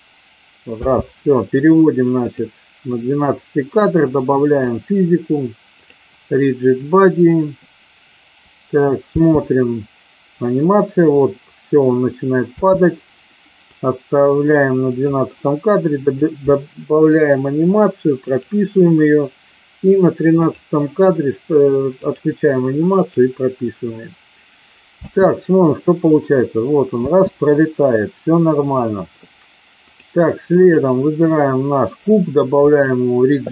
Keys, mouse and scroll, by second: 2.2 click, 4.6 click, 5.7 click, 9.1 space, 12.5 space, 13.7-15.1 drag, 16.1 click, 18.3 click, 20.4 click, 21.9 click, 22.9 click, 24.9 space, 28.6 click, 29.8 click, 30.6 click, 32.7 click.